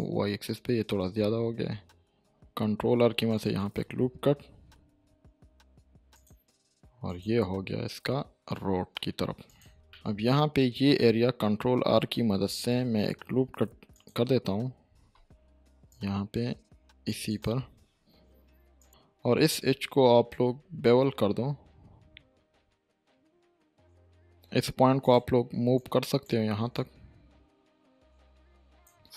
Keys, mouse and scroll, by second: 2.5 ctrl+scroll up 2, 2.7 ctrl+r, 3.3 click, 3.6 right click, 8.0 e, 9.4 click, 9.7 middle click, 9.9-10.5 shift+middle click, 10.6-11.1 scroll up 1, 11.8 ctrl+r, 13.9 click, 14.9 ctrl+r, 15.9-17.1 drag, 18.9-19.7 scroll up 1, 20.5 ctrl+b, 21.5-22.1 scroll up 2, 22.1-23.5 scroll up 1, 24.3-25.0 scroll up 2, 25.0-26.4 drag.